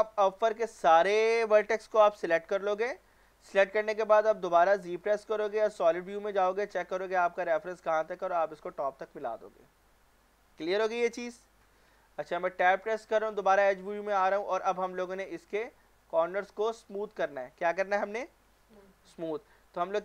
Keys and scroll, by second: 4.9 z, 12.6 Tab.